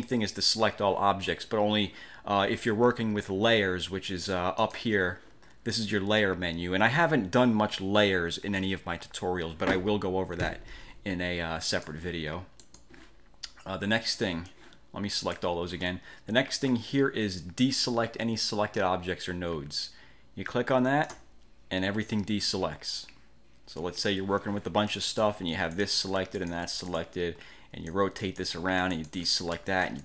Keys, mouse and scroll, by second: 4.7 click, 11.8 click, 12.7 click, 14.7-15.7 drag, 21.2 click, 25.0 click, 25.9 shift+click, 26.5 shift+click, 27.0 shift+click, 28.0-28.7 ctrl+drag, 29.1 ctrl+shift+click, 29.8 shift+click.